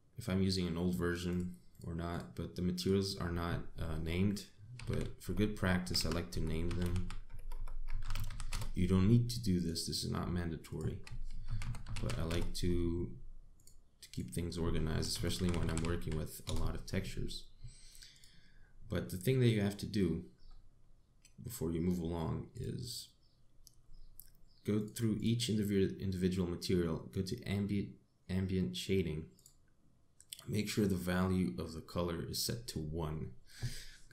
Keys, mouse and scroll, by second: 0.2 click, 1.9 click, 2.4 click, 2.7 click, 3.4 click, 7.6 s, 8.0 BackSpace, 8.2 BackSpace, 9.1 s, 10.3 click, 11.3 click, 14.2 click, 14.8 click, 16.2 l, 18.8 click, 21.1-21.6 scroll down 1, 23.2 click, 24.2-25.4 scroll up 2, 25.4 click, 25.8 click, 26.4 scroll down 1, 30.0 click.